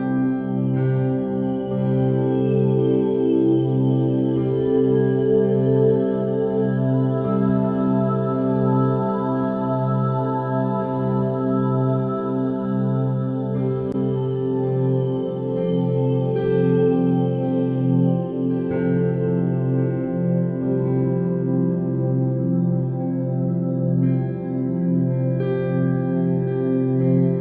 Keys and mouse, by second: 0.8 shift+a, 3.8 r, 9.6 KP_1, 10.3 g, 11.3 s, 12.4 r, 13.9 g, 16.3 Tab, 17.1 alt+z, 17.6 1, 17.8 click, 19.6 e, 21.5 e, 25.0 click, 25.3 g, 26.9 middle click.